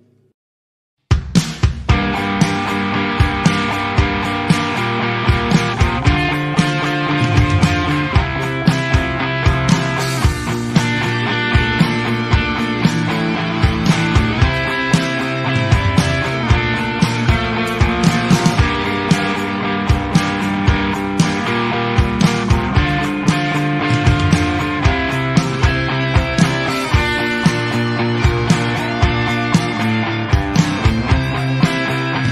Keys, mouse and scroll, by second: 0.2 Tab, 0.5-1.4 middle drag, 1.4 scroll down 3, 1.6-2.0 scroll up 2, 2.0-2.6 shift+middle drag, 2.6 alt+a, 2.7 click, 3.4 shift+middle click, 3.6 scroll up 3, 3.8 click, 4.0 Tab, 4.2 alt+a, 4.6 click, 5.3 click, 5.5 middle click, 6.0 a, 6.6 l, 7.0 s, 7.8 click, 8.0 middle click, 8.7 click, 8.9 click, 9.4 click, 9.7 middle click, 10.2 click, 10.7 click, 11.0 click, 11.3 middle click, 11.5 Tab, 11.6-12.2 scroll down 2, 11.8 middle click, 12.2-13.6 shift+middle drag, 13.6 click, 14.2-14.8 middle drag, 14.8 KP_1, 15.3 r, 16.4 click, 17.2 click, 17.6 r, 18.4 scroll up 1, 18.6 z, 19.0 shift+middle drag, 19.2-19.7 scroll up 1, 19.7 r, 21.2 r, 21.8 scroll down 1, 21.9 middle drag, 22.2 z, 22.9 click, 23.4-24.4 middle drag, 24.4 click, 25.0 KP_7, 25.5 r, 26.8-27.3 scroll down 1, 27.3 shift+click, 28.3-29.2 middle drag, 29.2 scroll up 4, 29.5 click, 30.3 middle click, 30.8 click, 31.7 s.